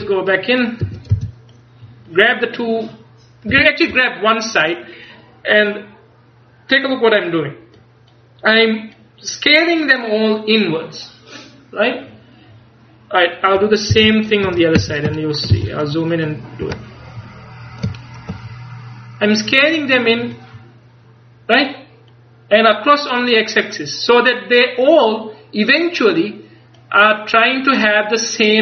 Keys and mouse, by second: 0.0 Tab, 0.0 click, 0.9 z, 1.2 c, 5.1-6.8 drag, 7.8 click, 12.3-13.4 middle drag, 14.0 c, 14.9 a, 15.6 c, 17.1 middle click.